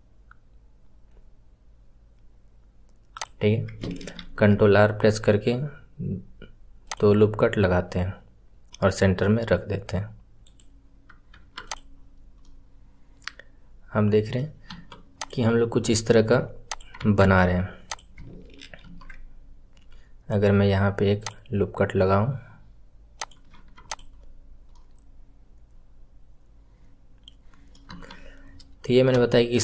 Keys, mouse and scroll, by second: 11.6 click, 11.9 scroll down 1, 12.4-14.6 middle drag, 14.6 KP_1, 15.1 click, 15.6 scroll up 5, 16.6 click, 17.8 click, 18.8 ctrl+r, 23.8 click, 24.0 scroll down 1, 24.7-27.7 middle drag, 27.8 KP_1, 28.4 scroll down 1, 29.2-29.6 shift+middle drag.